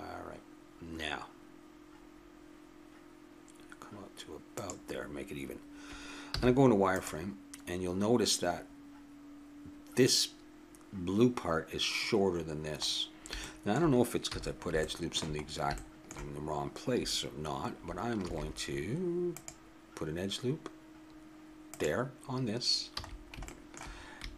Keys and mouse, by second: 6.4 z, 13.4 middle click, 14.3 a, 15.0 middle click, 18.2 ctrl+r, 21.2 click, 22.9 a, 23.5 middle click.